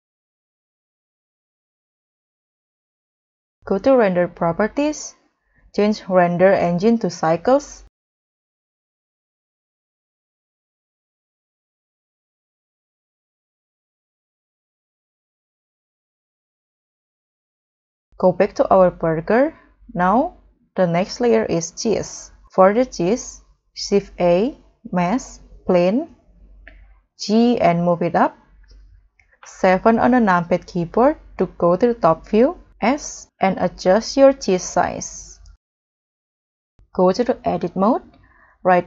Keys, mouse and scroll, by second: 12.5 double click, 13.4 3, 13.5 0, 13.7 0, 13.9 Return, 17.5 middle click, 17.6 middle click, 18.4-19.0 scroll down 7, 19.2-19.8 scroll up 4, 19.9 middle click, 20.4 scroll down 1, 20.5 scroll up 2, 20.7 middle click, 21.1-21.4 scroll down 2, 21.5 scroll up 1, 27.7 g, 28.0 z, 29.4 KP_7, 30.1-30.5 scroll down 2, 32.9 s, 34.5 scroll up 1, 34.6 middle click, 35.2 scroll down 1, 35.6 scroll up 2, 35.8 middle click, 36.0 scroll down 1, 36.4 scroll up 1, 38.6 right click.